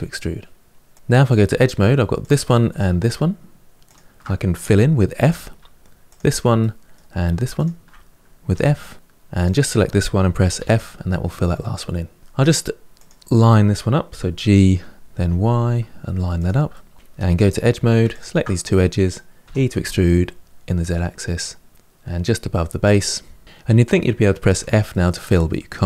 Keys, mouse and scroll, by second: 1.2 2, 1.9 click, 3.6 shift+click, 5.0 f, 5.8 click, 6.3 middle click, 7.3 shift+click, 8.3 f, 9.2 click, 10.3 f, 11.3 middle click, 12.2 1, 12.7 click, 13.9 g, 16.5 middle click, 17.1 2, 17.9 alt+click, 19.2 e, 23.3 middle click, 24.3 f, 24.7-25.8 middle drag.